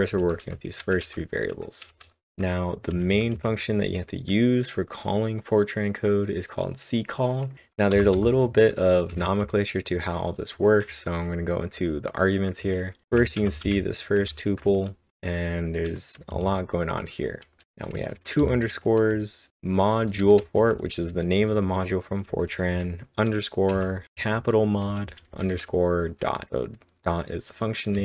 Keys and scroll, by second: 0.2-1.0 typing, 7.9-8.6 typing, 13.0 shift+Num_Lock, 13.0-14.2 typing, 16.3 w, 17.4-21.3 typing, 22.7-25.7 typing, 27.7-28.0 typing.